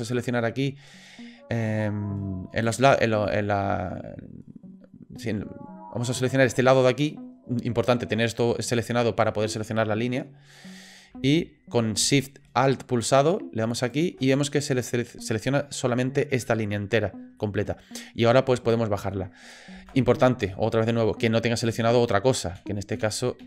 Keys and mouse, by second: 2.6 click, 13.8 alt+shift+click, 17.4 middle click, 18.7 click, 19.8 ctrl+z, 20.5 middle click, 22.5 v.